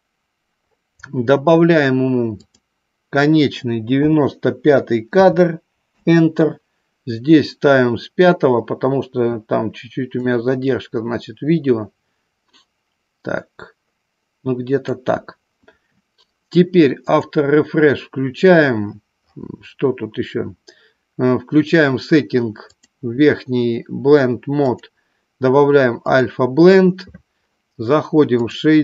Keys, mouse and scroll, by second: 2.4-6.3 drag, 10.2-14.9 drag, 17.1 click, 22.9-23.5 drag, 24.6-26.5 drag.